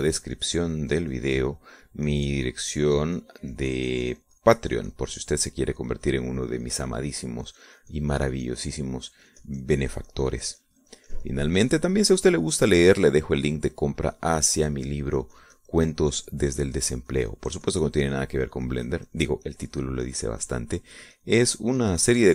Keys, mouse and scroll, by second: 4.0-22.3 drag.